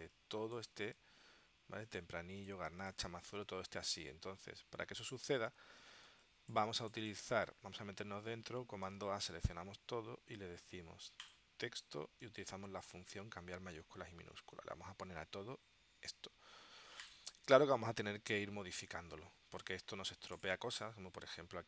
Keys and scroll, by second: 3.4 super+Tab, 6.2 space.